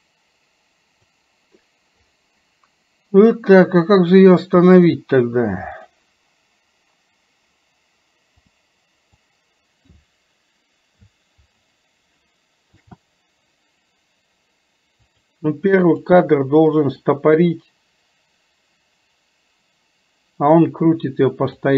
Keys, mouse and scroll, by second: 4.2 click, 5.9 click, 8.5 click, 9.4 click, 16.0 click, 17.1-21.7 drag.